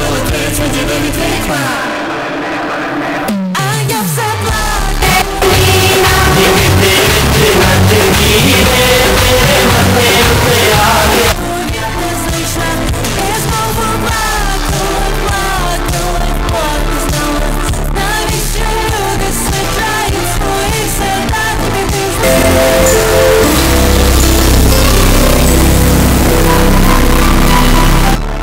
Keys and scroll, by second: 11.9 Page_Down.